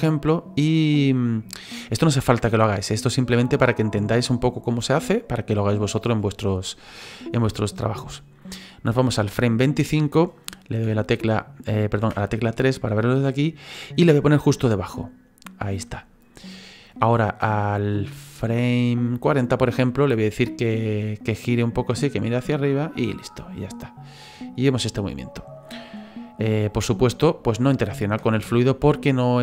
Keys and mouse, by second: 0.0 middle click, 6.8 middle click, 10.8 KP_1, 12.0 KP_3, 13.8 click, 19.0 click, 20.3 click, 21.2 click, 23.3 click, 25.7 middle click, 26.5 middle click, 27.7 click, 28.2 space.